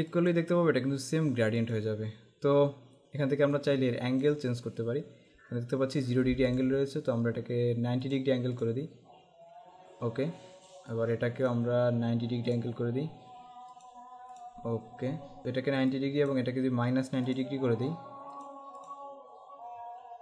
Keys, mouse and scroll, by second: 0.2 click, 1.7 click, 3.6 click, 6.7 click, 8.2 click, 11.0 click, 13.9 click, 16.0 click, 20.1 alt+scroll down 1.